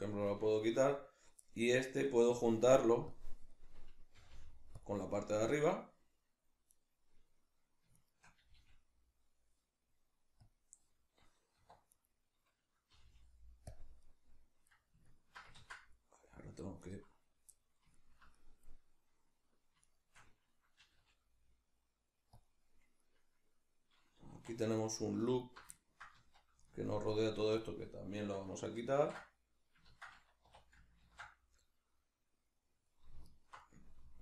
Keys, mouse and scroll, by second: 2.0 right click, 3.1 click, 3.5-4.8 middle drag, 4.2 g, 4.8 click, 5.2-6.7 middle drag, 6.7 right click, 8.0 shift+right click, 8.4 g, 10.6 click, 11.6 1, 11.9 right click, 12.9 g, 13.8 click, 14.7-16.8 middle drag, 15.6 ctrl+z, 16.8 right click, 17.5-19.8 middle drag, 19.8 shift+right click, 20.8 g, 22.4 click, 24.4 2, 24.8 right click, 25.3 alt+right click, 25.8-33.2 ctrl+middle drag, 26.2 z, 27.4 z, 33.2 alt+right click, 33.7 middle click.